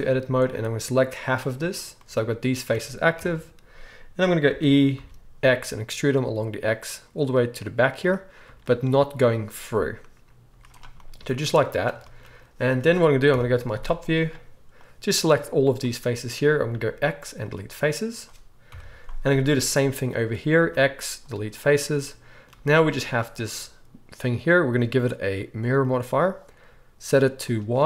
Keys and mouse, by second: 0.5-8.0 drag, 0.5-11.1 middle drag, 3.1 KP_1, 4.4 e, 10.4 z, 11.1-19.7 drag, 13.3 KP_7, 13.7 z, 14.7-19.7 middle drag, 14.7-19.7 right drag, 16.7 x, 18.7 KP_7, 20.6 x, 22.5 z, 27.1 drag, 27.6-27.8 drag.